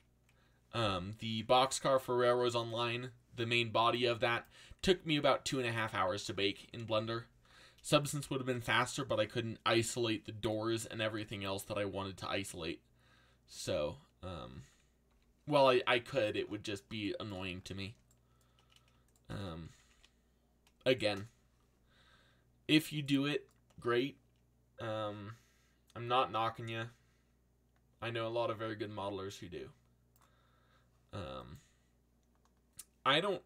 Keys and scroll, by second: 4.8 z, 5.9 a, 7.0 z, 15.1 z, 19.8 alt+a.